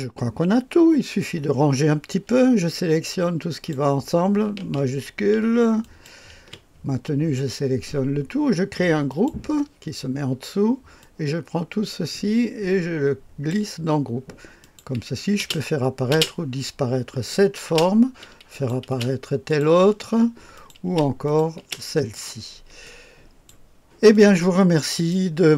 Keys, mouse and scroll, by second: 3.5 click, 5.8 shift+click, 9.1 click, 11.0-13.5 drag, 14.6 click, 15.4 space, 16.1 space, 17.6 space, 18.5 click, 18.9 space, 19.5 click, 20.6 click, 20.9 space, 21.3 click, 21.6 space, 22.2 click, 22.9 click, 24.2 click.